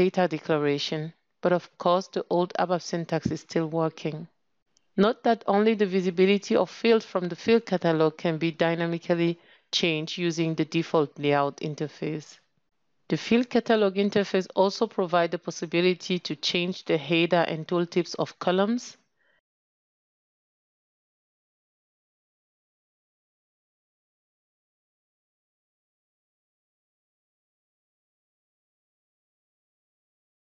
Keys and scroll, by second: 10.3 ctrl+<, 18.6 ctrl+space.